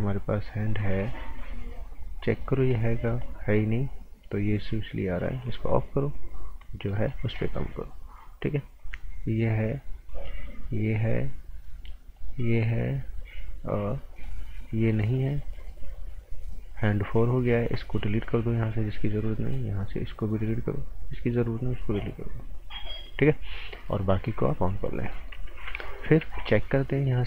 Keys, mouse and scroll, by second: 0.4 click, 1.9 scroll down 1, 2.2 right click, 2.5 scroll down 1, 2.8 right click, 3.2-5.4 scroll up 1, 5.4 click, 6.6-6.9 scroll up 1, 6.9 right click, 7.2 scroll up 1, 7.4 right click, 8.8 click, 24.9 scroll down 1, 25.1 right click, 25.4 z, 25.8 right click, 26.2 z, 27.0 click.